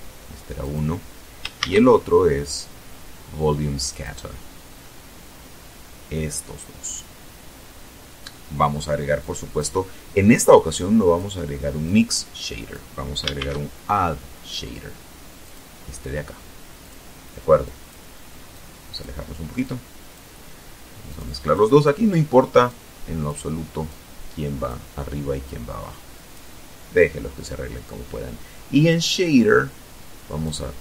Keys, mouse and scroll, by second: 2.1 click, 5.0 click, 7.3-8.0 drag, 8.5-9.6 drag, 10.0-11.1 drag, 11.6 shift+a, 13.6 click, 14.9 click, 15.8 click, 16.7-17.4 drag, 17.8-18.5 drag, 19.2-20.1 drag, 20.8-21.6 drag, 22.0-23.0 drag, 23.6-24.7 drag, 27.3-28.7 drag.